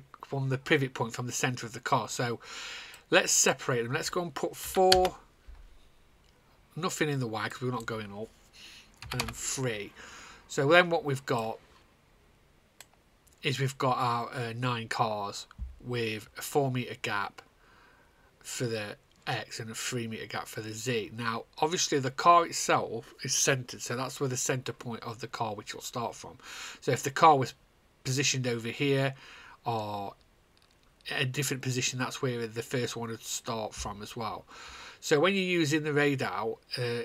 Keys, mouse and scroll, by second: 3.5 click, 4.6 KP_4, 5.5 Return, 7.5 click, 8.1 click, 9.0 KP_3, 9.8 Return, 11.3 click, 12.0 click.